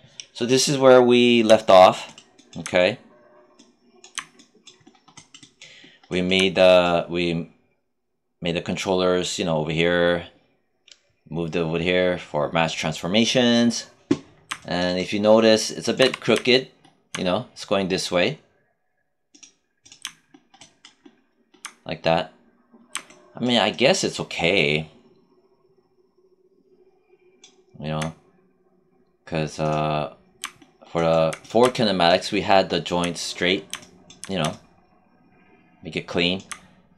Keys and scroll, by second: 16.0 w.